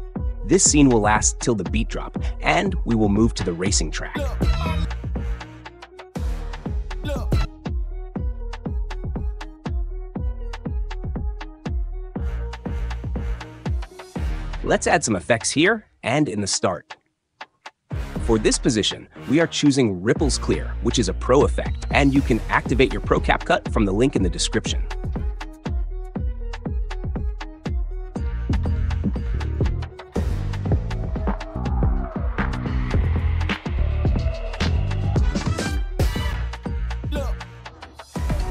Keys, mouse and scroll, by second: 2.1 click, 2.6 ctrl+b, 3.3 space, 4.8 space, 6.2 click, 6.6 space, 7.4 space, 8.9 click, 10.2 ctrl+b, 12.2-13.6 drag, 13.6 Delete, 15.5-16.5 drag, 18.8-19.8 drag, 23.2 drag, 23.7 click, 24.5 click, 24.7-25.6 typing, 24.8 click, 25.6 click, 26.9 click, 27.3 click, 27.9 click, 28.1 click, 28.4 space, 37.3 space.